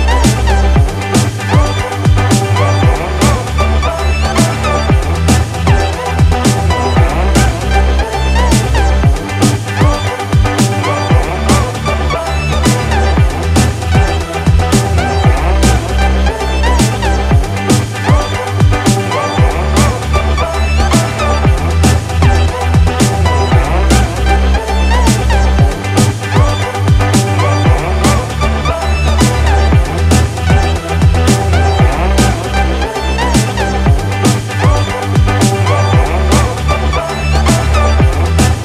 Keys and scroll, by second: 2.5 ctrl+=, 32.8 ctrl+-.